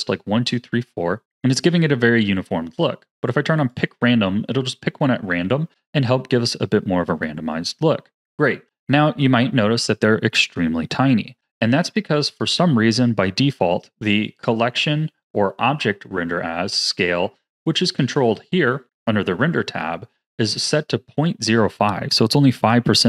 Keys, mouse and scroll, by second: 1.5-3.6 scroll down 1, 3.6 click, 4.9-5.6 scroll down 5, 5.6-8.1 scroll down 2.